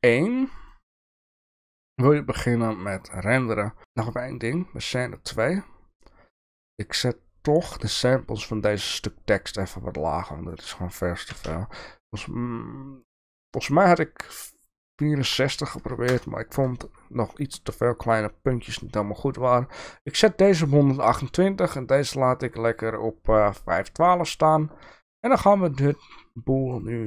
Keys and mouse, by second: 0.7 click, 10.6-16.7 drag, 25.8-27.0 drag.